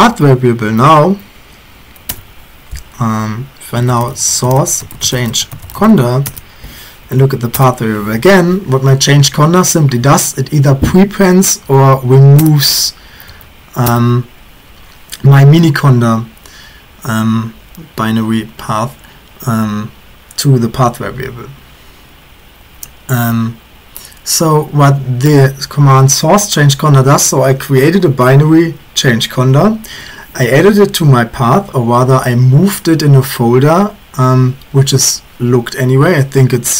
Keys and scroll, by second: 0.3 Up, 0.7 Up, 1.1 Up, 2.1 Return, 3.6-8.0 typing, 11.7 Up, 11.8 Up, 12.4 Return, 13.1 Up, 13.3 Up, 13.9 Return.